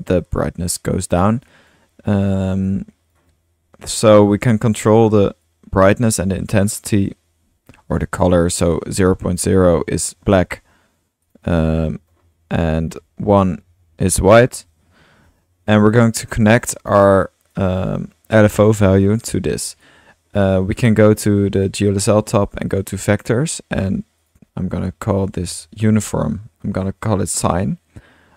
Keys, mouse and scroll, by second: 1.0 drag, 1.3 drag, 1.8-2.6 drag, 3.2-4.8 drag, 5.0 click, 5.4-6.3 drag, 6.9-8.4 drag, 8.2-10.3 typing, 8.5-9.4 drag, 11.3 click, 12.2-13.4 drag, 13.4-15.0 typing, 15.8 click, 16.4 click, 17.0 middle click, 17.3-17.6 drag, 17.6-17.9 middle drag, 19.2 click, 21.6 click, 22.0 drag, 22.6 drag, 24.2-28.3 drag.